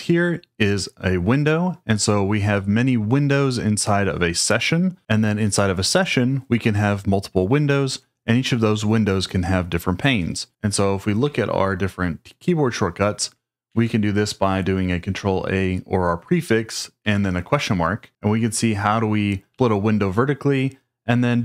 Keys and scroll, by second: 13.6 ctrl+a, 17.0 shift+/, 19.5 j.